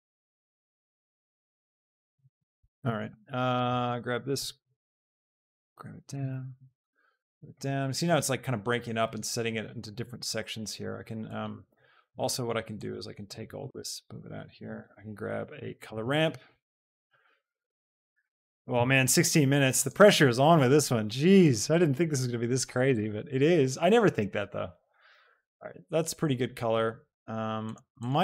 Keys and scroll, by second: 4.4 shift+g, 13.9 shift+g, 14.7 a, 15.8 p, 16.5 BackSpace, 17.6 o, 18.3 r, 18.7 Down.